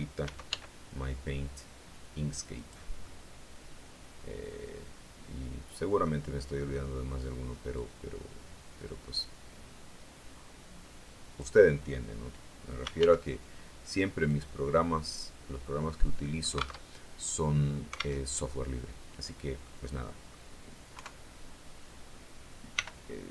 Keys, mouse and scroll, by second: 0.1 s, 0.3 x, 2.4 click, 2.9-6.1 middle drag, 7.7-11.5 drag, 12.5-13.4 typing, 14.1 click, 14.6 click, 16.7 alt+Tab, 18.1 alt+Tab, 19.5 click, 20.8 KP_3, 22.6 r, 23.2 x.